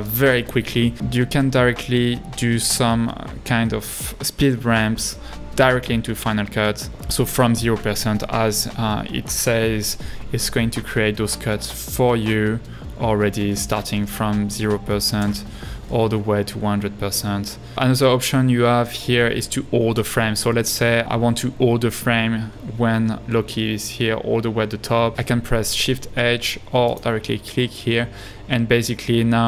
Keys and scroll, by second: 12.5 space, 15.2 h, 16.3 l, 21.0 Right.